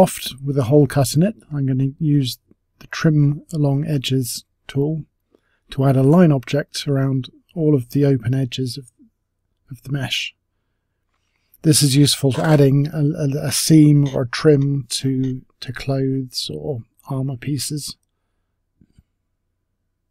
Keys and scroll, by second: 7.1 space, 16.1-19.2 typing.